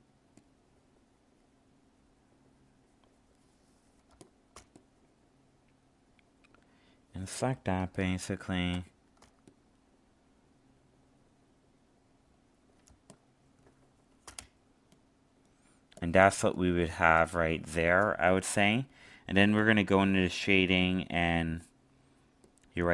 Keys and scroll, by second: 7.8 alt+space, 16.3 alt+space.